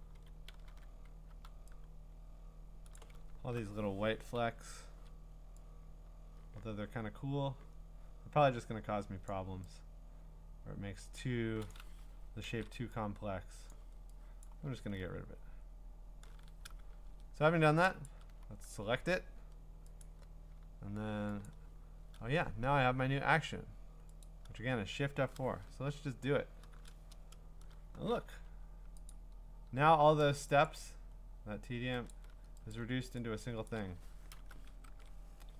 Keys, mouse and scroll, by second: 0.0-1.3 typing, 2.9 click, 3.2 scroll, 4.4-5.1 ], 9.3 click, 11.7 click, 12.5 ctrl+z, 13.7 click, 14.4 ctrl+click, 14.8-15.4 scroll down 3, 15.4 scroll up 4, 15.8-16.4 scroll down 4, 16.9 scroll, 18.1 ctrl+click, 20.0 click, 21.5 click, 24.2 click, 26.4 F4, 29.1 click, 30.7 click, 31.3-32.1 scroll, 32.1 click, 32.7 click, 34.7 click, 34.9 ctrl+Tab.